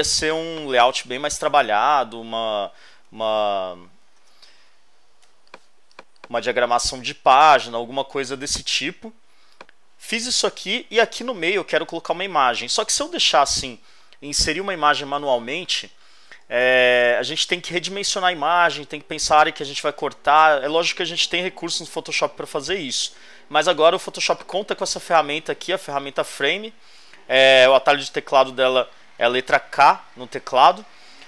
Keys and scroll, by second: 1.9 Return, 3.2 super+z, 4.2 super+Return, 5.2 super+space, 7.7 v.